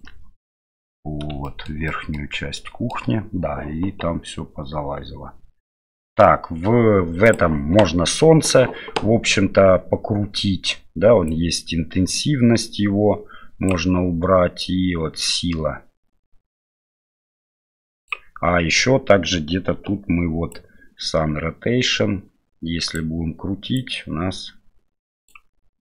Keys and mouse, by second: 1.4 shift+middle click, 1.8 shift+middle drag, 2.5 shift+middle click, 7.2 click, 11.4-13.7 drag, 14.6-18.0 drag, 20.5-22.9 drag, 23.7-25.3 drag.